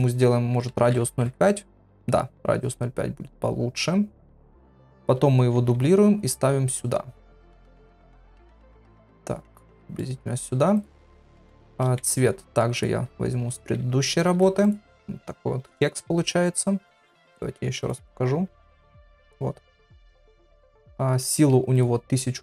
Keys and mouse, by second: 5.6 shift+d, 14.3 ctrl+v, 14.6 click.